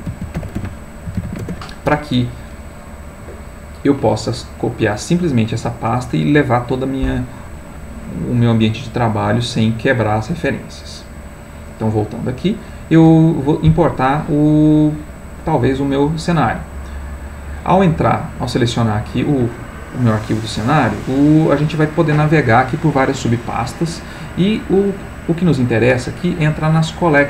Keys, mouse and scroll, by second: 0.0-1.2 typing, 1.4 Return, 11.7 click, 16.0 click, 17.0 click, 18.4 click.